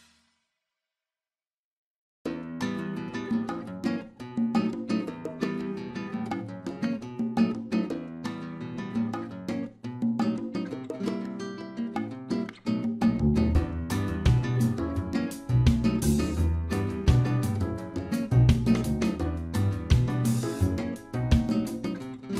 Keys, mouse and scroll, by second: 0.5-1.3 scroll down 4, 1.0 click, 1.3 middle click, 5.0 shift+middle click, 7.5 scroll up 2, 7.8 middle click, 8.5 click, 9.1 scroll up 1, 9.7 middle click, 9.7 scroll up 1, 11.3 click, 12.0 middle click, 12.3 scroll up 1, 13.0-13.5 scroll up 4, 13.5 middle click, 15.4 shift+click, 18.0 ctrl+a, 19.3 middle click, 22.2-22.3 scroll down 1.